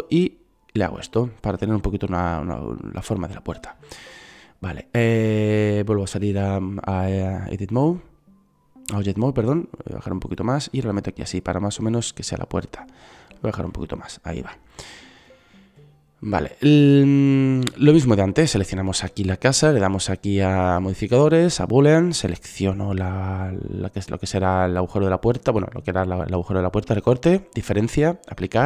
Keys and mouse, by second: 7.6-9.4 drag, 12.8-14.6 drag, 15.4-21.9 drag.